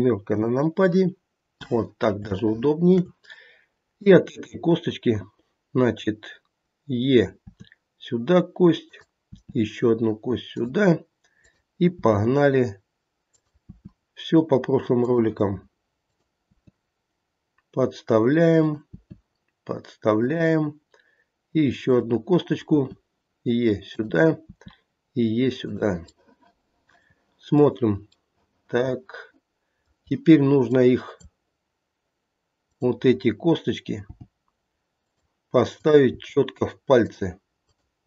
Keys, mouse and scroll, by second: 0.2 KP_7, 1.2 scroll up 2, 2.3 shift+middle click, 2.3 shift+scroll up 1, 3.9 click, 7.4 e, 9.3 e, 11.4 click, 11.9 e, 13.6 e, 16.1 click, 16.4 e, 18.8 e, 21.9 click, 22.7 e, 24.4 e, 26.6 middle click, 27.2 middle click, 28.7 middle click, 29.7 middle click, 30.6 click, 32.6 click, 34.0 g, 35.7 click, 36.0 g, 37.6 click.